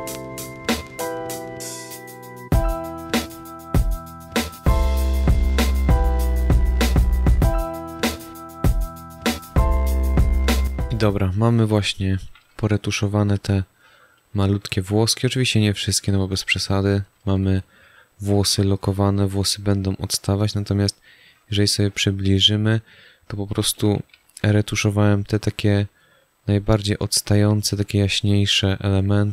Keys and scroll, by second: 0.0 space, 1.5-10.3 typing, 2.7 ctrl+alt+z, 11.6 space, 13.9 space, 16.4 space, 19.4 space, 22.0 space.